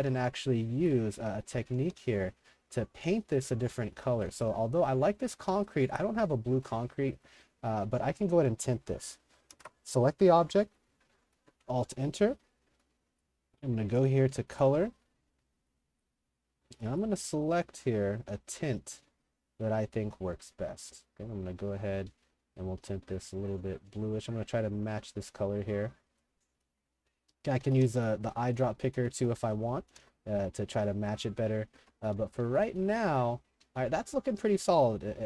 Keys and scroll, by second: 0.0-5.5 typing, 7.1-9.2 typing, 9.6 alt+KP_Enter, 27.0 Escape, 27.3-35.2 typing.